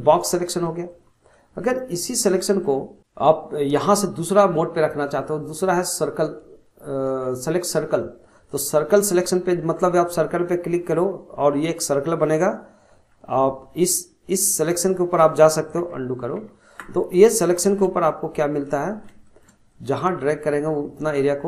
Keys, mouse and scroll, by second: 4.4-7.5 drag, 9.7-12.8 drag, 12.9 f, 14.4-15.8 drag, 15.8 ctrl+z, 16.4 ctrl+z, 17.1-19.7 middle drag, 19.7-21.4 drag.